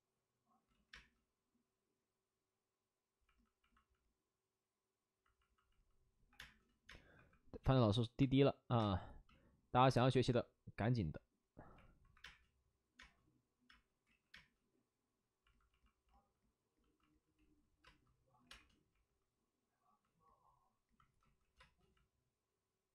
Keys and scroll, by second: 0.6 ctrl+z, 0.8 space, 5.3 ctrl+z, 5.4-7.1 typing, 8.7 space, 12.1-14.3 typing, 14.0 ctrl+z, 17.3 ctrl+z, 17.7 space, 18.3 5, 21.1 ctrl+z, 21.5 space.